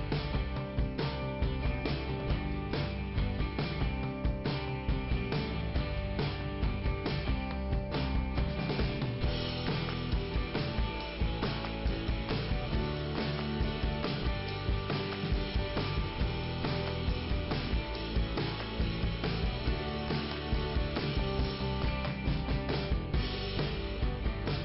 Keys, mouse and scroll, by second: 5.0 click, 5.9 click, 6.7 click, 7.7 click, 8.6 click, 9.6 click, 11.2 click, 14.1 click, 16.6 scroll up 1, 17.6 click, 19.2 click, 23.8 scroll down 1, 24.4 middle click.